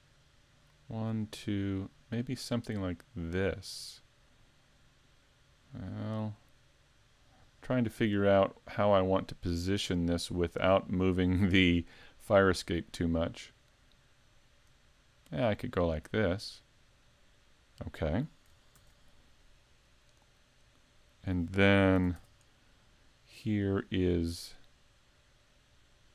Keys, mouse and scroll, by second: 18.8 ctrl+r, 21.0 click, 22.1 s.